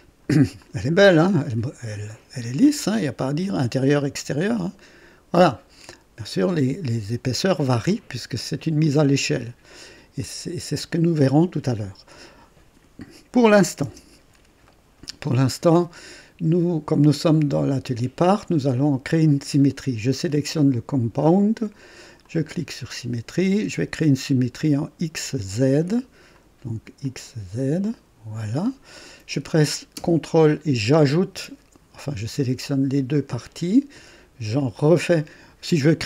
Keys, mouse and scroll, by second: 0.6-6.5 drag, 7.9 click, 8.8 click, 10.2 click, 11.1 right click, 13.8 KP_0, 14.6 right click, 15.4 scroll down 1, 20.2 click, 22.2 click, 26.3 click, 27.0 click, 27.8 click, 30.9 ctrl+click.